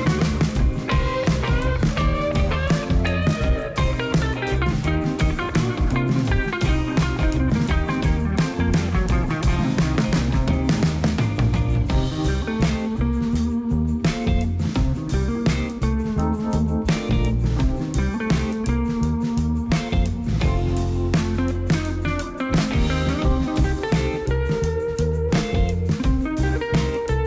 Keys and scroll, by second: 1.9 Tab, 2.6 a, 3.5 shift+z, 6.8 Tab, 14.7 Tab, 16.8 Tab, 20.2 space, 23.0 0, 24.6 shift+z, 25.6 alt+a.